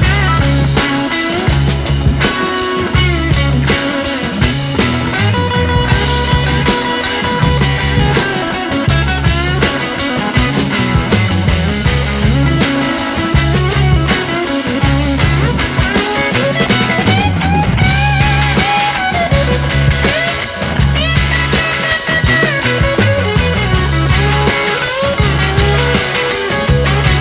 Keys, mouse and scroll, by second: 0.2-1.7 scroll down 1, 3.1-4.2 drag, 7.8 scroll up 2, 9.2-10.2 drag, 11.7-12.1 drag, 14.3 scroll, 14.6-14.9 scroll down 8, 14.9 middle click, 15.7-16.2 scroll up 1, 16.2 click, 21.6 click.